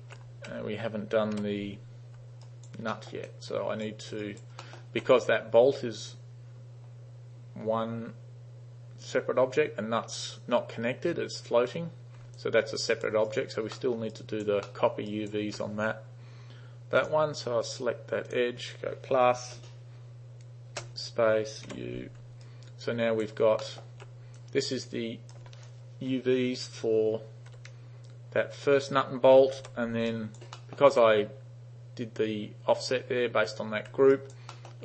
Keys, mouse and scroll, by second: 1.4 u, 2.5 alt+right click, 3.0 alt+middle drag, 3.3-3.8 alt+drag, 4.2 alt+right click, 4.6 alt+middle click, 12.4-13.1 alt+drag, 13.4 alt+right click, 13.8 alt+middle drag, 14.2 alt+right click, 14.8 alt+middle click, 15.2 alt+right click, 17.1 click, 18.4 click, 19.4 shift++, 20.8 space, 21.8 u, 22.5-23.3 alt+right drag, 23.7 alt+middle click, 24.4-25.4 drag, 27.6 3, 29.6 u, 30.2 alt+right click, 30.6 alt+middle click, 34.2 alt+right click, 34.6 alt+middle drag.